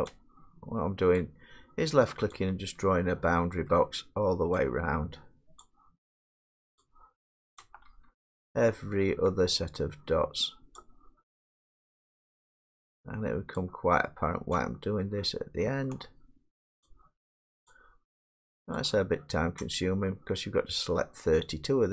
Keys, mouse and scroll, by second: 1.3 shift+click, 3.8 shift+middle click, 5.6 shift+click, 9.2 shift+middle click, 10.8 shift+click, 15.9 shift+middle click, 18.8 shift+click, 21.0 shift+middle click.